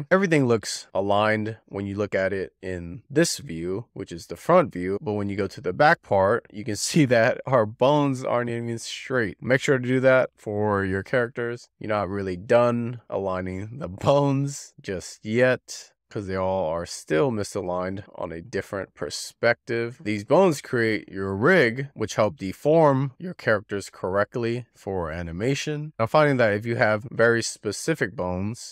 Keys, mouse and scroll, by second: 7.1-7.6 scroll up 5, 7.9 click, 8.6 click, 9.3 click, 9.9 click, 10.1 click, 10.2 click, 10.9 click, 11.1 click, 11.8 middle click, 12.1 scroll down 6, 12.4 click, 12.7 alt+middle click, 12.9 alt+middle click, 13.3 alt+middle click, 13.4-13.7 scroll up 6, 13.9 click, 15.1 click, 15.2 scroll up 4, 15.4 click, 15.8 click, 16.9 click, 18.6-20.5 drag, 21.3 click, 22.2 scroll down 3, 22.7 click, 22.7 scroll up 4, 23.3 click, 23.9 click, 25.2-26.4 drag, 28.0 scroll down 2, 28.2 alt+shift+middle click, 28.6-28.7 scroll down 3.